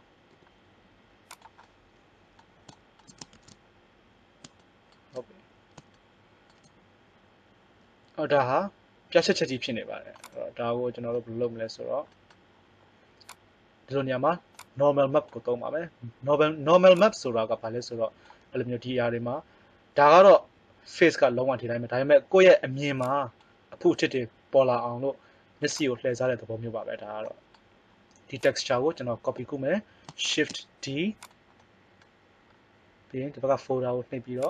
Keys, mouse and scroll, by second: 0.2 r, 1.6 middle click, 3.2 shift+z, 13.4 click, 23.0 click, 26.8 middle click, 28.4 click, 30.3 shift+d, 31.6 click, 32.3 click, 34.4 click.